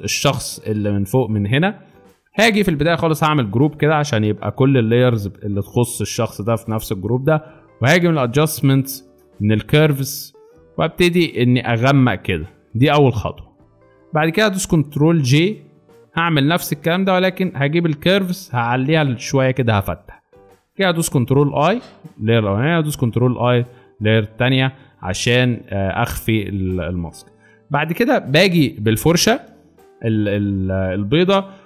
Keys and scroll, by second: 3.3 ctrl+g, 15.3 ctrl+j, 21.2 ctrl+i, 22.9 ctrl+i, 29.0 b.